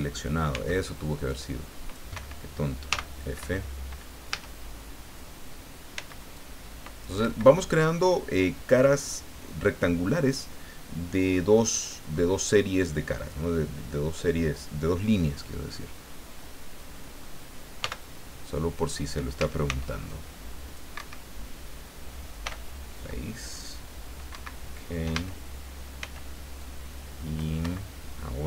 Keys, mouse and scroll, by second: 0.5 c, 1.3 click, 2.1 Escape, 2.9 f, 3.4 Escape, 4.2 a, 5.9 c, 6.3 click, 7.2 Escape, 17.8 f, 19.4 a, 19.6 c, 20.1 click, 21.0 Escape, 22.4 f, 24.3 Escape, 25.1 a, 26.0 c, 26.6 click, 27.6 Escape.